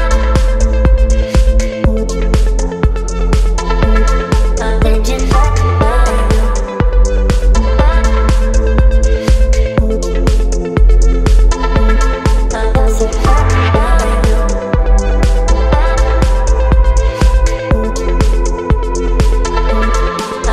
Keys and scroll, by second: 10.2 space.